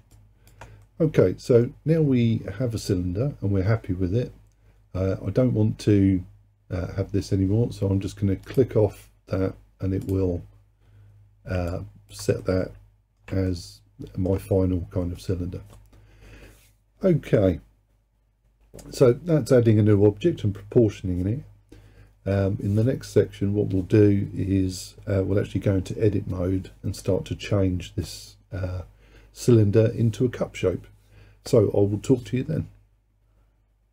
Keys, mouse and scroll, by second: 0.2 alt+click, 0.9-3.9 middle drag, 8.5 click, 10.1 click, 11.8 alt+click, 12.5-17.7 middle drag.